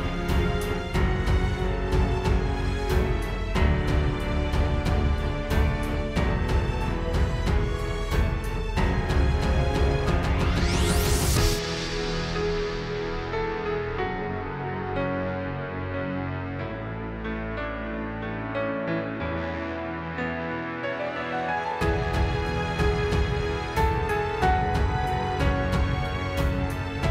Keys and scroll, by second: 2.8 space, 3.4 alt+super+space, 6.1 space, 6.5 super+z, 6.7 space, 7.5 space, 8.0 super+space, 8.5 space, 9.6 super+j, 11.1 space, 11.4 space, 11.9 space, 12.6 super+space, 15.0 super+s, 18.5 space, 19.1 super+space, 20.5 space, 21.2 super+j.